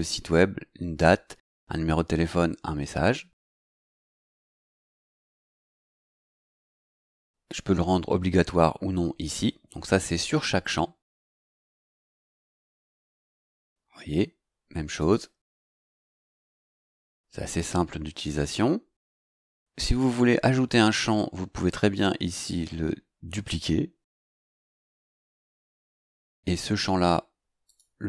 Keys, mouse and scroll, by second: 12.6 click, 15.0 click, 18.5 click, 24.7 click, 27.6 click.